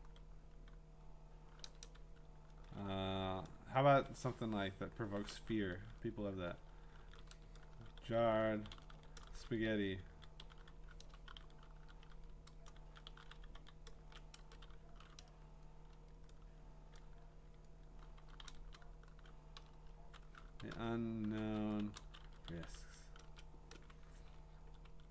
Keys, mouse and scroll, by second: 1.7 BackSpace, 1.8 BackSpace, 7.0-14.5 typing, 17.9-24.2 typing.